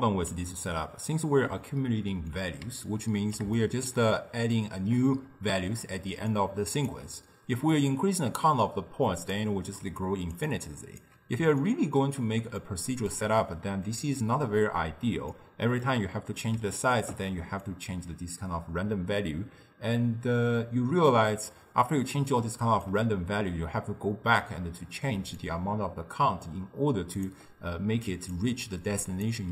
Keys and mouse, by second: 0.7-6.2 ctrl+middle drag, 6.2 d, 6.3-7.0 drag, 7.0 d, 7.1 d, 7.8-9.9 drag, 9.9 d, 10.0 click, 10.4 d, 10.5 click, 11.1 d, 11.6-17.7 ctrl+middle drag, 17.7-20.7 shift+drag, 23.5-25.4 middle drag, 25.4-28.0 shift+drag, 28.0 d, 28.1 click, 28.5 d, 28.9 click, 29.3-29.5 d.